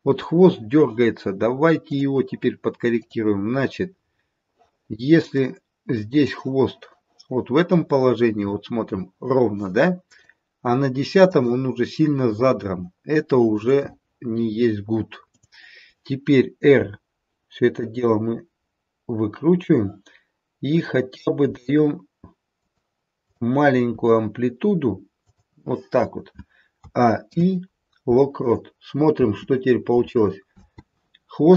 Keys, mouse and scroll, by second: 1.8 click, 2.9 click, 5.4 click, 7.8-8.3 scroll up 4, 9.1-10.1 scroll down 1, 10.1 click, 11.7-13.2 scroll down 2, 13.2 scroll down 1, 13.5 click, 16.8 click, 16.8 r, 20.6 click, 21.4 r, 23.2 click, 24.5 r, 26.8 a, 27.2 i, 29.1 space, 30.5 space.